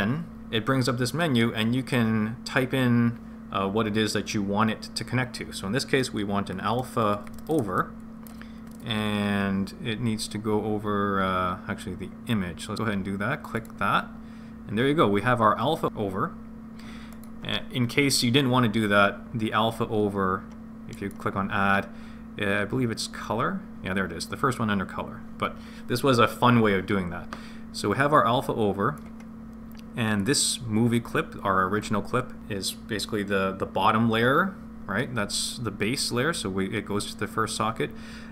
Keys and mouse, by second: 0.8-15.1 drag, 17.1 click, 21.1-25.3 drag, 28.3 click, 30.2 click.